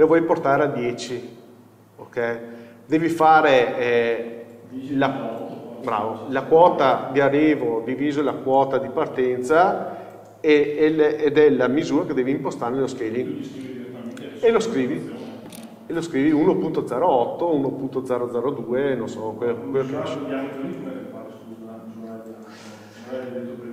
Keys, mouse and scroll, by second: 23.5 KP_7.